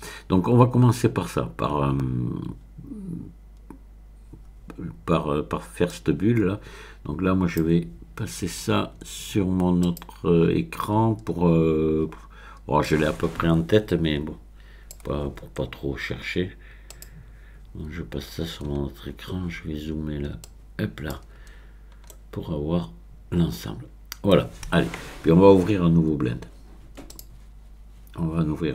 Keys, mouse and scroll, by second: 5.9-7.8 drag, 9.8 click, 10.2 click, 12.8-15.3 drag, 16.9 click, 18.1-19.9 scroll up 1, 20.4 click, 21.6-22.1 scroll up 1, 22.1-24.9 middle drag, 27.1 click.